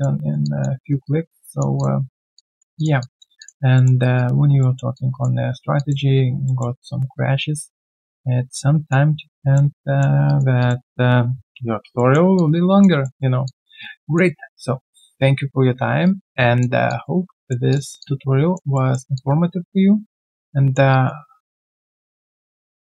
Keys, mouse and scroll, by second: 0.2 alt+right click, 0.4 alt+click, 0.8 alt+right click, 1.0 alt+click, 2.3 alt+click, 3.7 alt+middle click, 4.0 alt+right click, 4.6 alt+middle click, 4.9 alt+click, 6.4 alt+middle click, 6.8 alt+right click, 7.1 alt+click, 9.0-9.4 alt+scroll down 1, 9.4 alt+middle click, 9.8 alt+click, 10.2 alt+right click, 10.6 alt+click, 11.6 alt+click, 11.9 alt+middle click, 12.3 alt+click, 13.0 alt+middle click, 13.4 alt+click, 13.8 alt+right click, 14.0 alt+click, 16.0 alt+right click, 16.3 alt+click, 17.3 alt+middle click, 18.0 alt+click, 18.7 alt+middle click, 19.1 alt+click, 20.9 alt+right click, 21.4 alt+click, 21.6 alt+middle click, 21.8 alt+click, 22.4 alt+click.